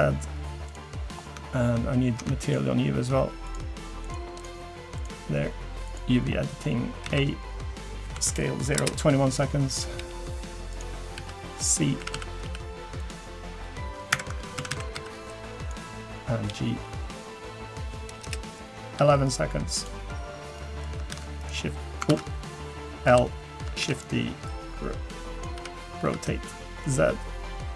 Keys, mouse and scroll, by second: 1.0 scroll up 2, 1.3 Tab, 2.2 Tab, 5.9 click, 6.3-6.6 scroll up 2, 6.6 scroll down 1, 7.0 a, 7.6-8.7 scroll down 4, 8.1 s, 10.0 g, 14.6 a, 14.9 c, 19.0 g, 20.1-20.6 scroll down 2, 20.6 middle click, 21.1 shift+d, 22.1 ctrl+z, 23.1 l, 23.8 shift+d, 24.5 click, 25.6 r, 27.0 g.